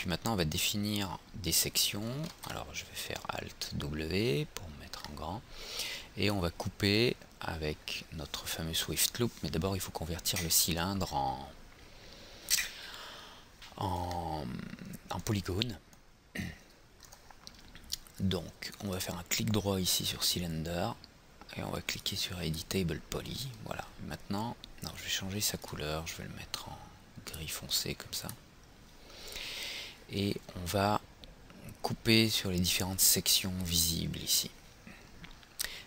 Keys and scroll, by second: 2.4 alt+w.